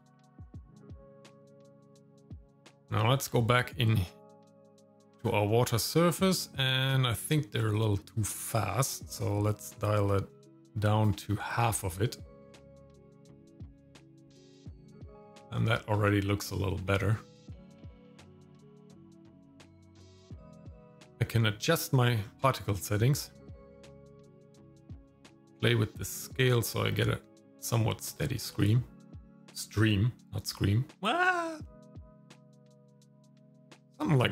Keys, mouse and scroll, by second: 1.9 click, 3.2-4.7 scroll down 3, 7.7-11.1 drag, 15.4 shift+middle click, 17.6 click, 18.6 click, 19.2 click, 20.6 middle click, 20.7-21.1 scroll up 3, 20.8 shift+middle click, 21.1 click, 21.1-21.6 scroll down 3, 22.2 scroll up 2, 22.3 click, 24.5-25.0 scroll down 2, 25.4-32.9 shift+drag, 33.2 scroll down 2, 33.6 shift+middle click, 34.1 scroll down 1.